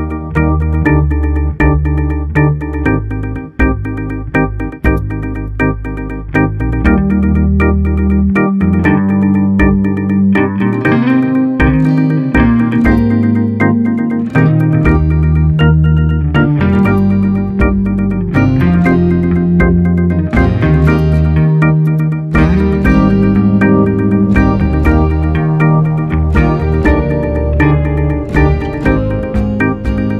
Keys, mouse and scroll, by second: 2.0 click, 2.2-5.4 middle drag, 7.5 Tab, 7.9 click, 9.0 click, 9.3 Tab, 9.6 click, 10.6-12.7 middle drag, 12.7 shift+s, 13.8 Tab, 14.3-15.2 middle drag, 15.2 shift+a, 17.9 r, 28.1-29.8 middle drag, 29.8 g.